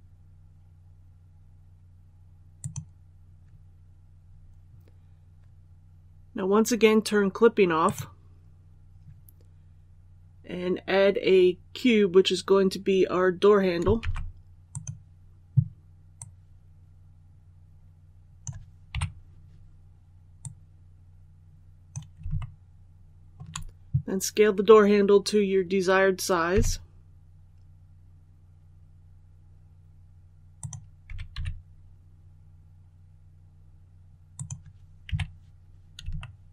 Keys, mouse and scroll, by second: 2.4-3.5 drag, 13.9 shift+a, 14.5-18.5 drag, 18.8 KP_1, 20.2-22.0 drag, 22.2 shift+middle click, 26.4 s, 30.4-31.5 drag, 30.9 s, 31.2 x, 34.2 click, 34.9 KP_3, 36.0 shift+middle click, 36.3 scroll up 1.